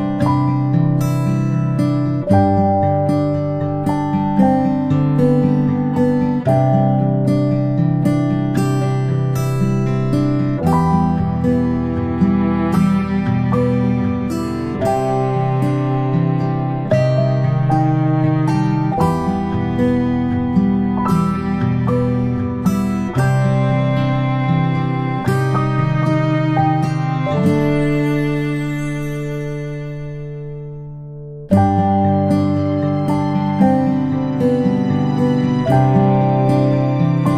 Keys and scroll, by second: 9.9 space, 10.2 space, 17.7 space, 23.0 ctrl+z, 35.1 shift+space, 35.3 shift+space, 36.8 ctrl+z, 37.0 ctrl+z.